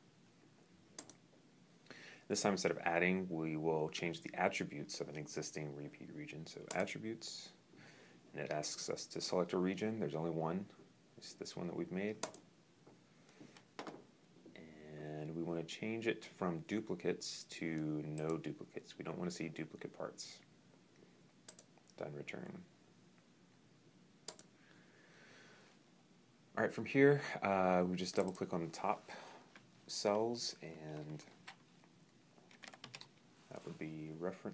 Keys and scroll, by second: 31.1 Caps_Lock, 32.0-33.0 typing.